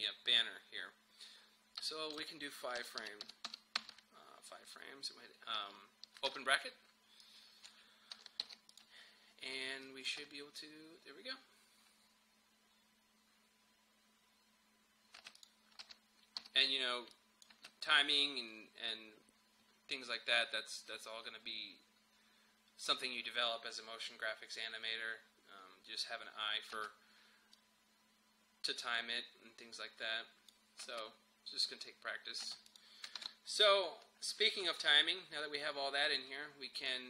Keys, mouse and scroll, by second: 1.8 shift+click, 2.8 Page_Down, 6.3 [, 7.2 click, 8.5 alt+], 8.7 click, 10.1 space, 15.3-16.4 typing, 15.4 click, 17.1 click, 17.2 click, 17.6 space, 26.8 space, 27.5-30.9 drag, 30.9 space, 32.7 click, 33.2 ctrl+s, 34.7-37.0 drag.